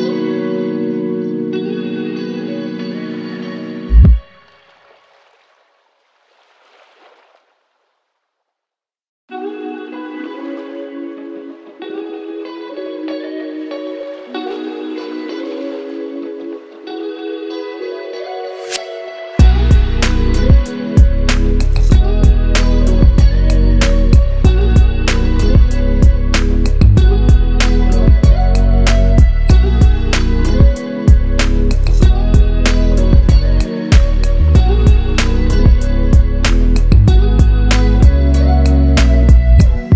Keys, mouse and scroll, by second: 2.6 ctrl+i, 3.2 b, 4.5 click, 4.7 right click, 5.8-6.5 drag, 14.6 v, 14.7-16.4 drag, 18.1 ctrl+t, 18.7-19.5 drag, 33.6 click, 36.9 click, 38.3 shift+F2.